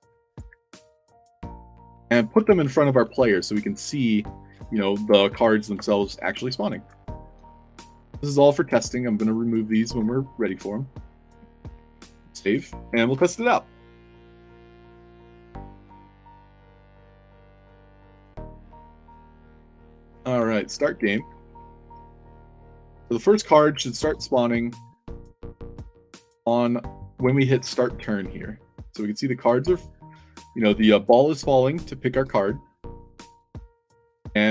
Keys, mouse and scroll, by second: 0.0 drag, 0.9 ctrl+d, 1.6-2.3 drag, 1.8 s, 2.1 shift+c, 3.0 a, 3.2-4.4 shift+drag, 5.2 o, 5.9 shift+click, 6.1-6.7 shift+right drag, 7.3 i, 8.0-8.3 shift+drag, 9.0-9.6 shift+drag, 9.9-11.5 typing, 11.8 ctrl+s, 17.5 click, 18.0 click, 20.0-24.1 typing, 27.5 e, 32.1 e, 34.0-34.5 typing.